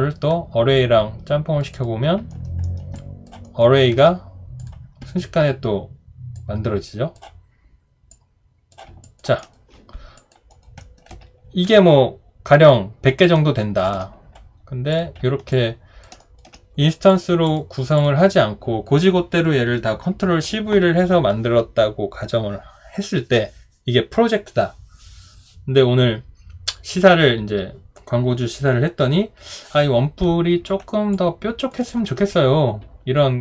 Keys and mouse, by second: 2.3 alt+right click, 2.6 alt+middle click, 2.9 alt+click, 3.4 alt+right click, 9.0 alt+click, 9.4 alt+right click, 10.2 alt+click, 10.5 alt+right click, 10.8 alt+middle click, 13.2 alt+click, 15.5 alt+click, 16.2 alt+right click, 31.1 alt+click.